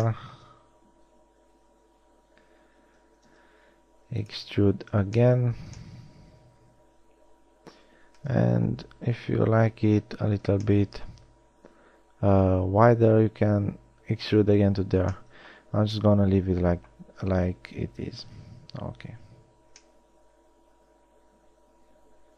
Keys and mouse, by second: 1.7 e, 5.0 z, 5.8 z, 8.5 KP_1, 8.7 z, 14.7 z, 19.3 z, 19.8 z.